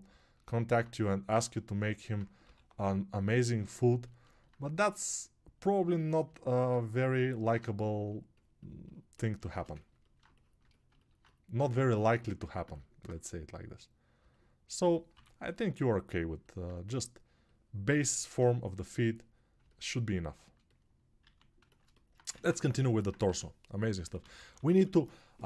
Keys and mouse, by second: 6.3 alt+click, 6.3 alt+middle click, 6.3 alt+right click, 22.5 ctrl+Tab, 23.3 g, 24.1 ].